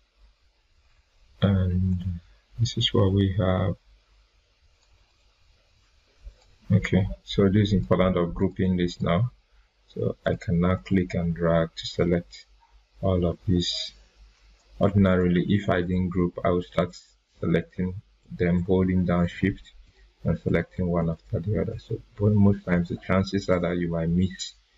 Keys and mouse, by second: 4.7 click, 5.1 right click, 6.2 right click, 6.3 click, 10.7-12.6 drag, 14.4 Delete, 15.1 ctrl+z, 15.7 click, 19.2 shift+click, 23.8-24.7 drag.